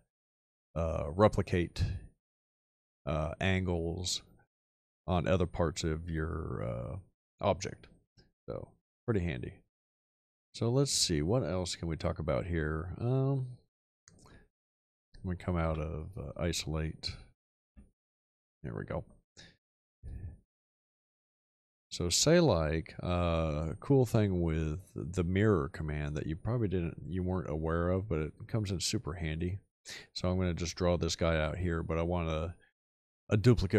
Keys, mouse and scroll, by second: 15.6 /, 17.6 ., 20.0 shift+click, 20.5 shift+middle click.